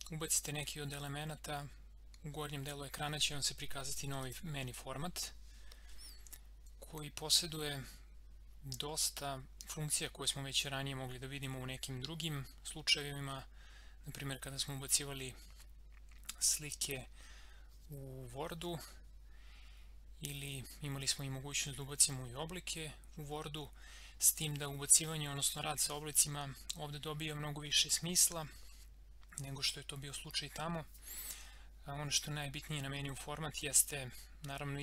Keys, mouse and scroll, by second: 4.2 click.